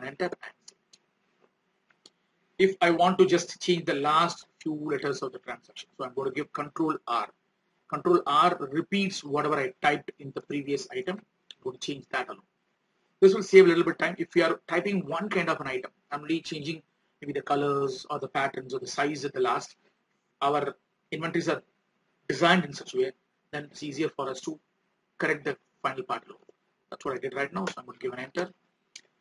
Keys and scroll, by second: 9.1 ctrl+r.